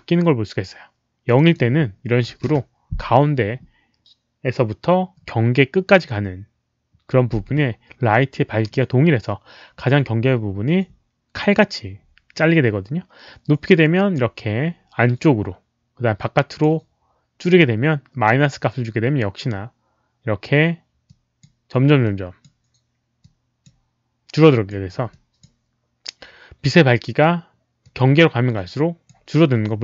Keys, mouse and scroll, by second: 1.2 click, 1.4 click, 2.2 KP_0, 2.4 Return, 13.6 click, 16.1-16.6 drag, 21.0-21.3 drag, 22.0 click, 23.1-23.6 drag, 24.3 click, 25.0 click, 27.8-29.0 drag.